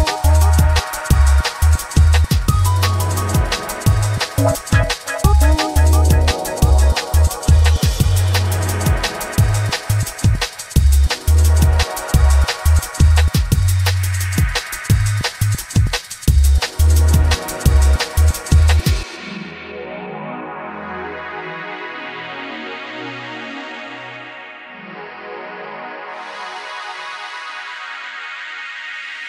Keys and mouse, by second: 1.3-1.7 drag, 2.6 space, 3.4 space, 4.4 click, 6.7 shift+click, 7.6 space, 8.2 space, 8.5 click, 9.1 space, 9.9 space, 10.5 ctrl+z, 11.2 space, 11.8 space, 12.3 space, 12.7 space, 13.0-14.6 shift+drag, 14.7 space, 16.3 space, 17.4 click, 17.8 ctrl+Tab, 17.9 click, 20.9 alt+middle drag, 21.4 space, 21.8 g, 28.1 click.